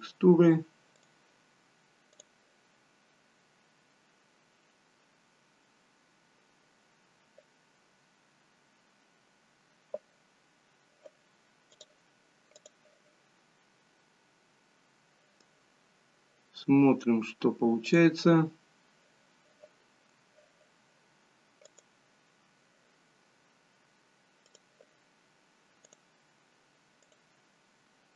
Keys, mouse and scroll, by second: 18.1 click, 21.8 click.